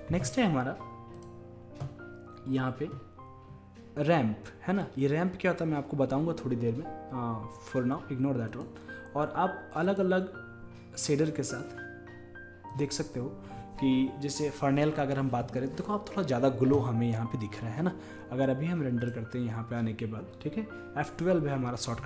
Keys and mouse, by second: 0.0 F11, 1.2-10.3 drag, 11.2-13.0 drag, 19.1-20.8 drag.